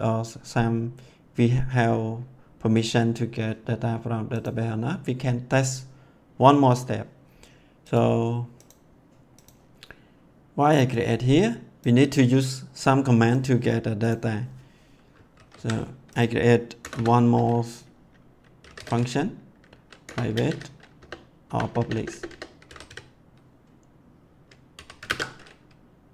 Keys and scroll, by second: 15.3 ctrl+s, 16.8 Return, 18.3-19.3 typing, 20.0 Return, 20.3 space, 20.9 BackSpace, 22.4-23.3 typing, 24.7 l, 25.0 ctrl+space.